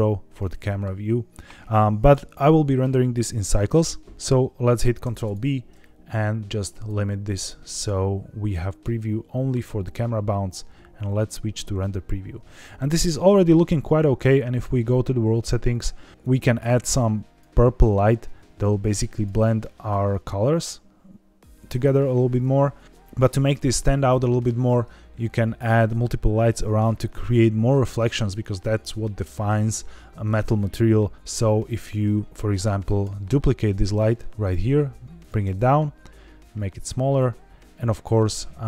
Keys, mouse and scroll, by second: 0.1 scroll up 2, 0.5 shift+middle click, 1.2 scroll down 2, 4.9 ctrl+b, 7.4 scroll up 3, 8.7 z, 11.6 scroll down 1, 14.4 click, 15.2 click, 15.6 click, 16.1 click, 24.6 scroll down 1, 27.4 scroll up 1, 33.0 shift+d, 34.3 click, 34.5 g, 34.6 z, 35.1 click, 37.1 click.